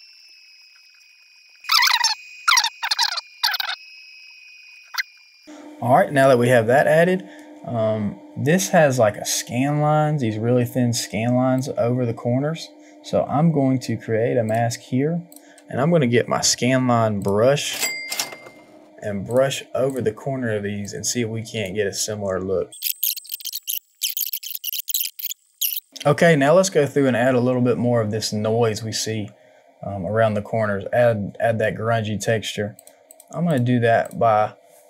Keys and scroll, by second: 22.9 ctrl+z, 23.4 ctrl+z, 23.6 Return, 23.9 ctrl+z, 24.0 KP_1, 24.1 space, 24.2 ctrl+z, 24.9 ctrl+z, 25.1 space.